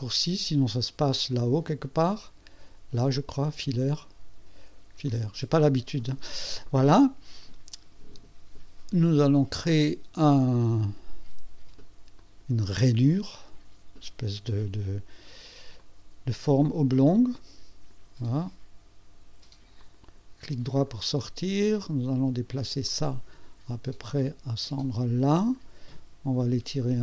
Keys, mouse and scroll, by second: 3.1 click, 5.1 click, 7.3 scroll up 1, 12.2 click, 15.8-18.1 drag, 19.8 click, 20.7 right click, 22.8 click, 23.1-25.7 drag, 26.4-27.0 drag.